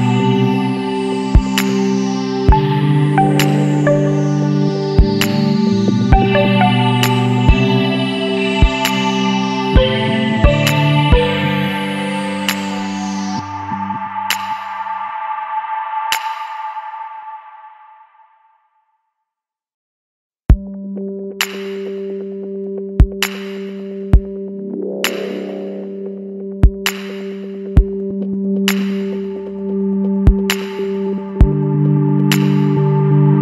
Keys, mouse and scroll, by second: 0.2 Tab, 1.4 middle click, 1.6-2.9 scroll up 1, 4.3 click, 4.9-5.8 scroll down 1, 5.8 click, 6.3 click, 7.3 click, 7.9 click, 10.5 click, 11.3-11.7 middle drag, 11.7-12.2 scroll down 10, 12.2 middle click, 12.5-13.2 scroll up 2, 13.2 shift+d, 14.2 shift+middle drag, 14.4-14.9 scroll up 1, 14.9-15.3 middle drag, 15.3-18.4 scroll up 2, 19.5 click, 23.1-23.8 scroll down 5, 23.8-25.0 middle drag, 25.0 click, 26.6 ctrl+z, 27.2-27.8 scroll up 1, 27.8 scroll up 3, 27.9-28.4 middle drag, 28.4-28.9 scroll down 2, 28.9-29.6 scroll up 1, 29.9 click, 32.6-33.4 drag.